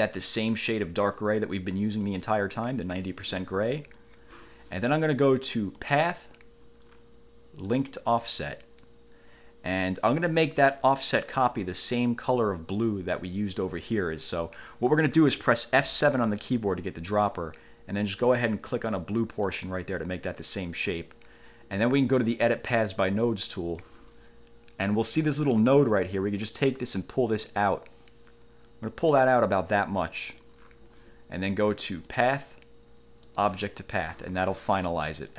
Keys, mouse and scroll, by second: 2.2 click, 5.9 click, 7.8 click, 13.3 middle click, 16.0 F7, 18.7 click, 23.5 click, 26.3-30.7 drag, 32.3 click, 33.5 click.